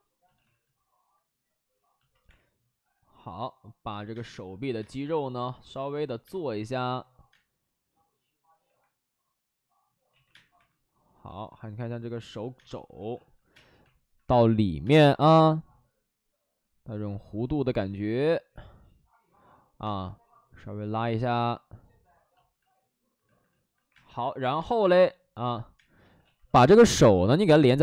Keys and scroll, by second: 0.3 alt+s, 2.2 3, 4.0 space, 4.7 space, 6.2 space, 6.5 2, 7.2 space, 8.5 1, 10.0 ctrl+z, 10.2 space, 10.5 1, 12.5-14.7 typing, 12.8 alt+s, 19.8 space, 21.1 alt+s, 23.8 2, 23.8 space, 24.5 2, 24.5 space, 25.7 space, 25.9 ctrl+z, 26.1 ctrl+z, 27.2 space.